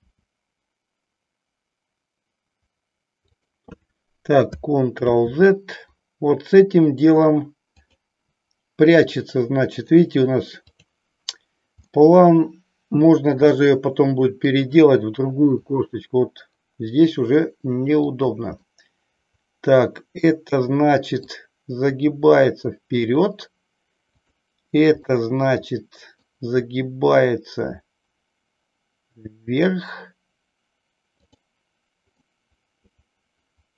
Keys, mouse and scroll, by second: 0.1 r, 5.3 ctrl+z, 7.7 click, 9.1-10.1 middle drag, 10.7-11.3 drag, 11.8-14.7 middle drag, 15.7 r, 18.3 click, 18.7-21.3 middle drag, 21.9 r, 23.1 click, 24.1 click, 25.2-26.5 middle drag, 26.7 r, 31.6 click, 32.3-33.7 middle drag.